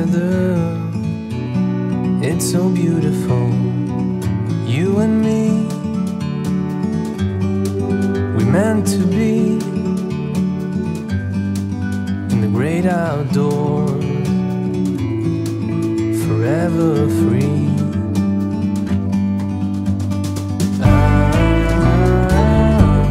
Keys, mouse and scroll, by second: 1.7 e, 4.0-4.7 scroll down 5, 4.7 scroll up 1, 5.0 Tab, 5.2 click, 5.4 scroll up 3, 5.6-6.1 middle drag, 6.1-6.4 drag, 6.6 scroll down 3, 7.9 click, 8.3-9.0 drag, 9.0-9.4 scroll up 4, 9.4-10.3 middle drag, 10.3 g, 11.9 g, 14.2 KP_3, 14.7-15.1 scroll down 5, 15.2-15.6 scroll up 3, 15.6-16.5 middle drag, 16.5 click, 16.9 scroll down 1, 17.1-17.7 shift+middle drag, 17.7-18.3 scroll up 5, 18.3-20.9 shift+middle drag, 21.0-21.4 scroll up 4, 21.4-21.9 shift+middle drag, 21.9-22.3 scroll up 1, 22.3-23.1 shift+middle drag.